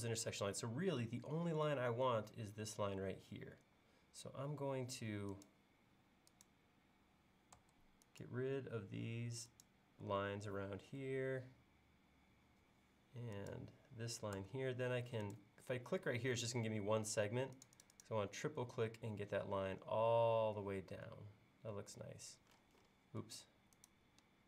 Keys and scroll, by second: 7.6 BackSpace, 8.8 BackSpace, 10.1 BackSpace, 14.4 BackSpace.